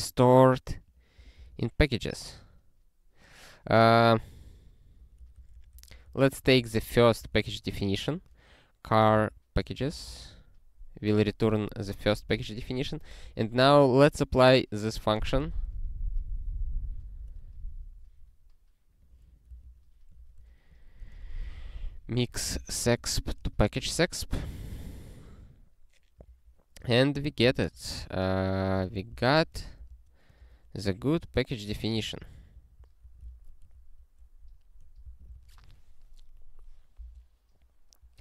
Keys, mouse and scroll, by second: 0.8 click, 1.6 ctrl+e, 4.4 ctrl+p, 4.9 ctrl+p, 5.1 ctrl+p, 5.3 ctrl+p, 5.5 ctrl+p, 5.7 ctrl+p, 5.9 ctrl+p, 6.0 ctrl+p, 6.4 ctrl+n, 6.6 Return, 6.6-10.1 typing, 12.7 ctrl+p, 13.2 Return, 14.9 ctrl+space, 15.1 ctrl+n, 15.4 ctrl+w, 15.5-17.2 ctrl+p, 19.0 click, 19.4 Return, 19.6 ctrl+y, 20.2 ctrl+p, 20.4 ctrl+p, 20.9-23.2 typing, 23.5 alt+shift+s, 23.9 ctrl+n, 24.5 ctrl+e, 26.3 ctrl+p, 26.8 ctrl+p, 27.2 ctrl+a, 27.4 Return, 27.7 ctrl+p, 27.9-31.6 typing, 31.7 ctrl+f, 32.1 alt+s, 32.5 ctrl+n, 32.8 ctrl+n, 33.0 ctrl+e, 33.7 ctrl+p, 34.3 ctrl+a, 34.8 ctrl+p, 35.0 Return, 35.3 ctrl+s.